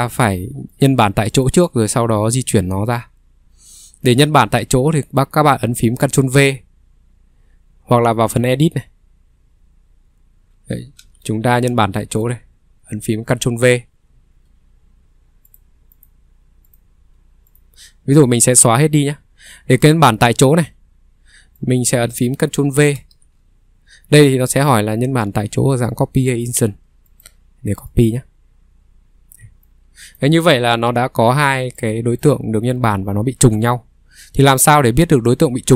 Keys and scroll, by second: 4.2 Escape, 11.0 ctrl+3, 14.0 Escape, 14.2 ctrl+3, 15.0 Delete, 18.2 Delete, 19.2 Delete, 23.0 ctrl+v, 30.6 ctrl+z, 33.0 ctrl+z.